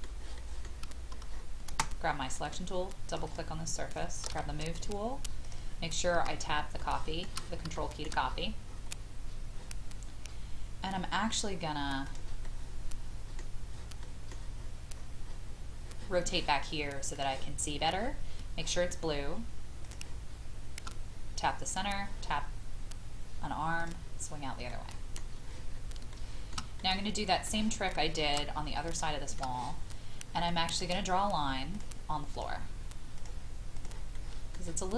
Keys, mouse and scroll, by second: 0.3 shift+middle click, 1.3-1.7 scroll up 1, 2.3 click, 4.3 m, 5.4 click, 6.8 shift+middle click, 7.7 shift+middle click, 8.2 scroll up 1, 12.0 click, 12.4-13.7 middle drag, 14.5-15.2 scroll up 1, 17.1 click, 19.8 shift+click, 21.7 click, 24.7 middle click, 25.2 scroll down 1, 26.1 shift+middle click, 26.8 middle click, 27.9 shift+middle click, 29.0 shift+middle click, 30.7 click, 34.1 middle click.